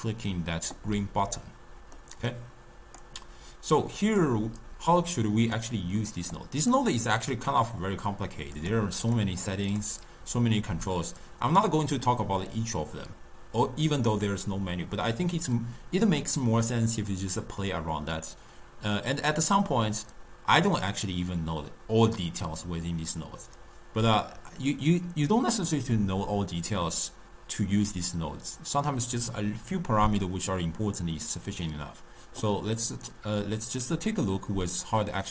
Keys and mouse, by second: 1.5-2.4 middle drag, 2.4-3.9 drag, 5.2 click, 6.4 click, 9.1 click.